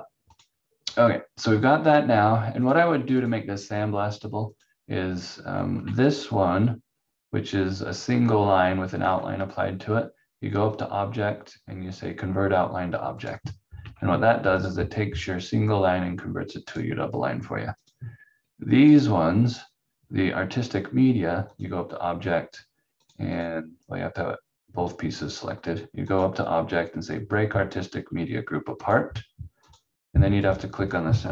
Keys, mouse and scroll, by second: 0.3 click, 5.7 v, 9.0 v, 10.7 click, 13.8 v, 14.6 click.